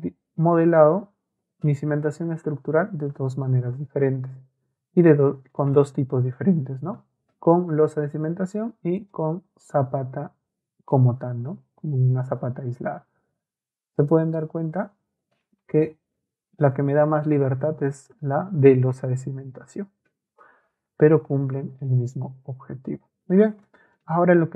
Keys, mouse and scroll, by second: 5.6 right click, 9.0 right click, 14.0 right click, 15.9 ctrl+a, 17.4-18.1 ctrl+scroll up 2, 22.7 Escape, 23.6 middle click.